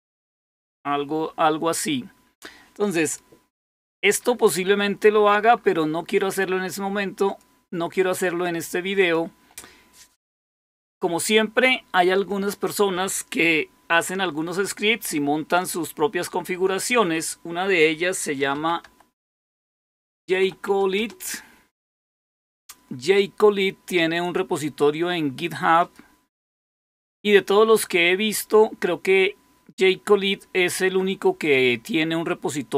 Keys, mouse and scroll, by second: 1.2-2.2 scroll down 1, 2.2-4.2 scroll down 1, 4.2-4.9 scroll down 1, 4.9-6.3 scroll up 1, 6.3-7.2 scroll up 1, 7.2 click, 8.9 click, 18.2-21.0 typing, 25.7 click.